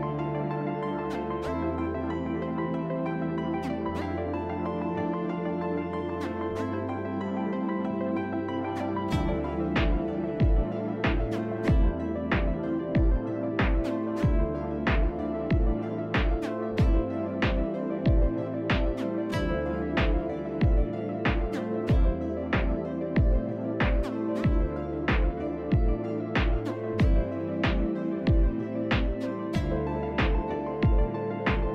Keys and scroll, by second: 0.3 f, 1.6 f, 2.2 s, 9.4 z, 12.7 t, 13.6 z, 23.6 s, 26.5 s, 30.3 s.